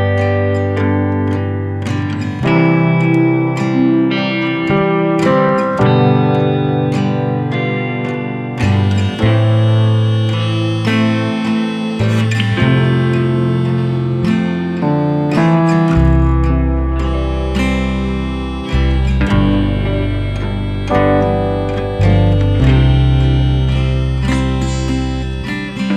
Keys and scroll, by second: 4.9 ctrl+=, 10.0 ctrl+=, 17.4 ctrl+0, 25.5 ctrl+[.